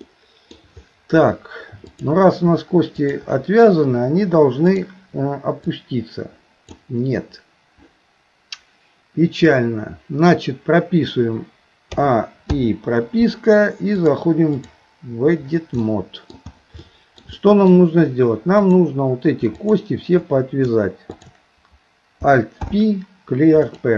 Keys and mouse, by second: 0.1 middle click, 2.0 shift+click, 3.1 shift+click, 4.8 click, 5.6-6.8 drag, 12.0 a, 12.6 i, 13.9 click, 15.8 middle click, 16.8 shift+middle click, 17.4 middle click, 19.7 shift+click, 21.1 shift+click, 22.6 alt+p.